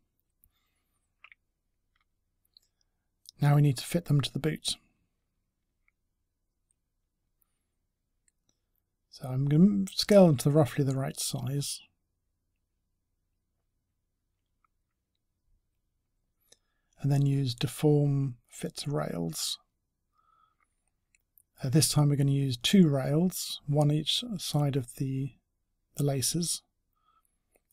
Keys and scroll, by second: 6.1-6.9 typing, 9.5 w, 13.3-14.3 typing.